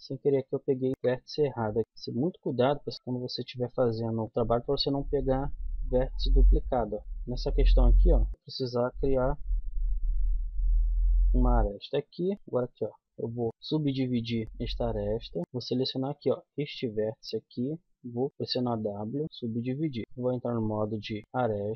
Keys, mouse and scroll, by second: 0.2 ctrl+z, 0.9 a, 1.8 z, 4.0 click, 4.2 k, 7.0 click, 9.1 f, 9.8-10.9 middle drag, 10.9 click, 11.7 middle click, 13.2 w, 15.4 click, 18.3 w, 20.6 click, 21.5 right click.